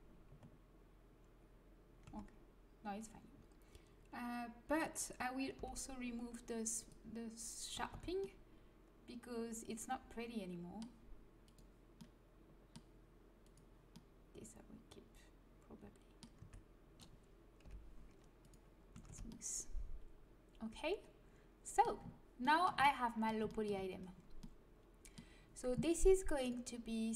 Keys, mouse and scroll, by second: 2.0 a, 5.5 l, 6.7 click, 7.7 a, 7.9 Tab, 11.4-15.2 drag, 15.2 middle click, 16.4 Tab, 17.6 l, 18.4-20.2 drag, 18.9 a, 19.0 Tab, 26.4 click.